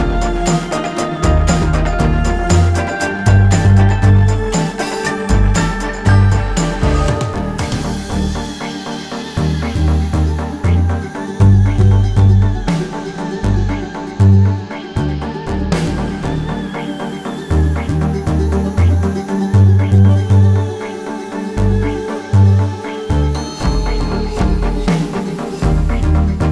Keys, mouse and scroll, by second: 0.4 click, 1.0 alt+scroll up 1, 1.5 alt+scroll down 1, 1.8 space, 2.0 click, 7.4-11.6 alt+shift+drag, 12.0 space, 12.4 click, 17.7-19.4 alt+shift+drag, 19.8 space, 20.3 click, 26.0-26.5 alt+shift+drag.